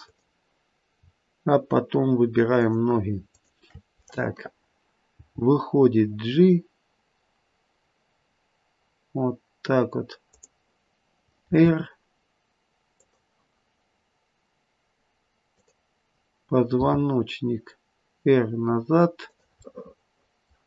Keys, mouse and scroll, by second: 0.0 click, 2.5 shift+click, 5.1 g, 11.4 r, 15.5 click, 16.7 r, 19.6 middle click.